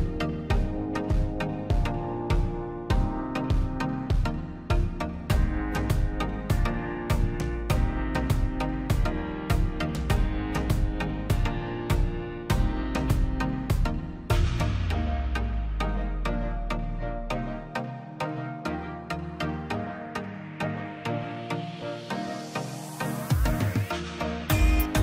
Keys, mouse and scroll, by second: 0.1 click, 0.6-2.0 middle drag, 2.0 click, 2.7 Delete, 3.2 middle click, 3.6-4.1 scroll up 1, 4.1 click, 4.6 middle click, 4.8 scroll up 1, 5.0 click, 5.6 p, 5.8-7.3 drag, 7.3 scroll down 1, 7.8 middle click, 8.0-8.5 scroll down 1, 8.9 middle click, 9.6 scroll up 1, 10.6 middle click, 10.8 scroll down 1, 11.9 click, 12.4-12.8 scroll down 1, 12.8 middle click, 13.1-13.4 scroll up 1, 13.5 click, 13.7-14.2 scroll up 1, 14.4-16.2 drag, 16.2 click, 16.4 scroll up 1, 16.6 click, 17.5 ctrl+z, 17.9 click, 19.0 ctrl+z, 19.4-20.8 drag, 20.8 p, 21.1 click, 22.0 space, 22.2 click, 22.4 scroll down 1, 23.1 click, 24.0-24.8 scroll down 2, 24.2 click, 24.8 middle click.